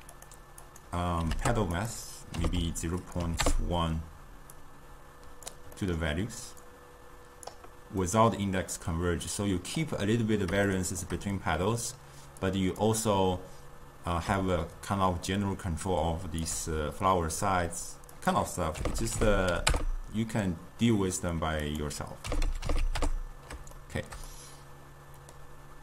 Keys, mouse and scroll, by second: 0.2 click, 0.8-5.9 drag, 5.9-6.8 middle drag, 6.8-8.1 drag, 8.1-9.4 middle drag, 9.4-10.8 drag, 10.8-12.6 shift+middle drag, 12.6-17.6 drag, 18.3-21.3 drag, 21.8-23.9 drag, 23.9-25.8 shift+middle drag.